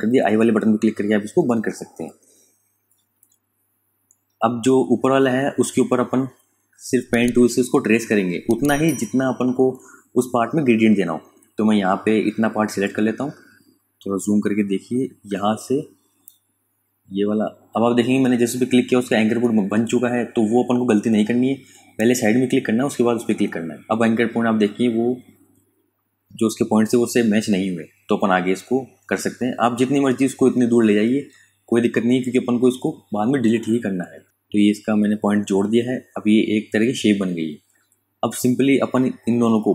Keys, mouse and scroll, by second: 1.1 click, 9.8 KP_Subtract, 10.5 click, 11.9 ctrl+z, 12.5 click, 12.9 space, 13.2 click, 13.5 space, 16.1 click, 17.3 ctrl+z, 17.7-19.1 typing, 18.3 click, 20.3 click, 23.2 ctrl+alt+click, 28.4 click.